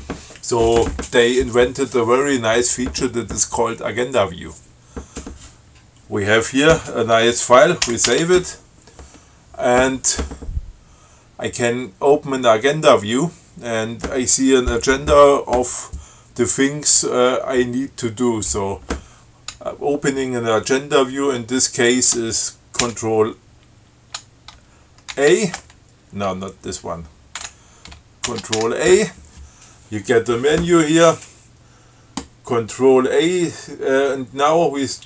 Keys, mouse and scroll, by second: 8.1 ctrl+x, 8.3 ctrl+s, 23.1 ctrl+c, 25.3 ctrl+a, 27.6 q, 28.5 ctrl+c, 28.8 ctrl+a.